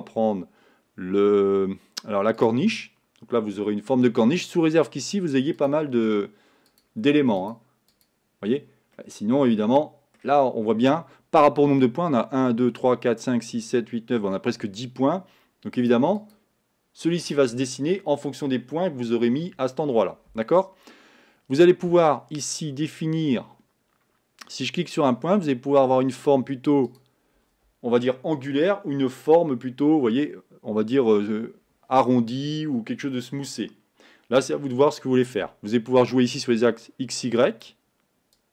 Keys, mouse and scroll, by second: 6.0-9.1 drag, 9.1-16.1 middle drag, 16.1-25.7 drag, 27.1-38.5 drag.